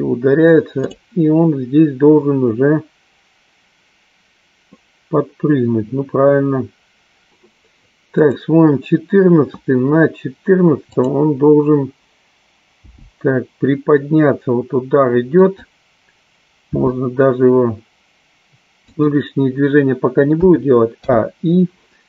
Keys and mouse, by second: 1.5 click, 8.8 click, 11.0 click, 13.0 g, 16.8 r, 19.2 click, 21.3 i.